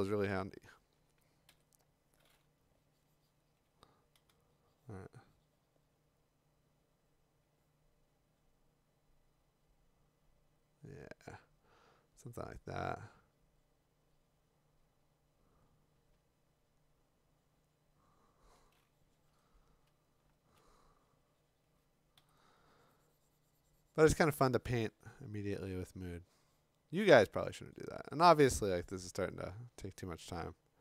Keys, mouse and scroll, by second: 1.5 x, 4.1 6, 19.9-20.6 ], 22.2 5, 30.3 x.